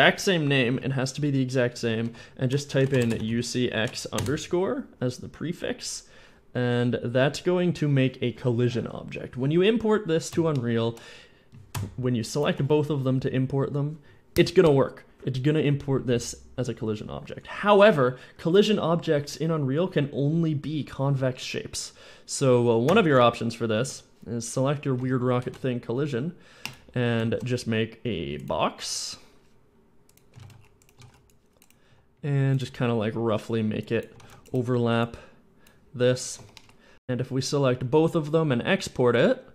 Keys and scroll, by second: 2.1 shift+u, 2.7 shift+x, 3.2 shift+x, 4.3 Return, 22.7 Tab, 23.0 Tab, 23.6 a, 24.8 a, 25.2 a, 25.3 x, 25.5 x, 27.1 shift+a, 27.4 shift+a, 30.2-31.7 typing, 34.0 a, 34.0 c, 36.2 Tab.